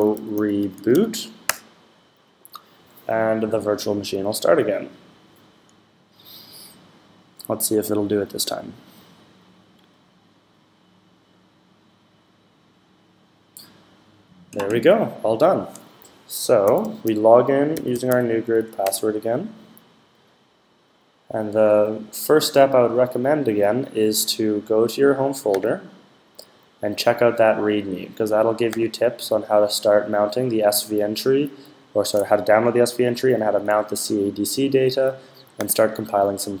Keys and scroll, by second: 0.0-1.3 typing, 16.3-18.4 typing.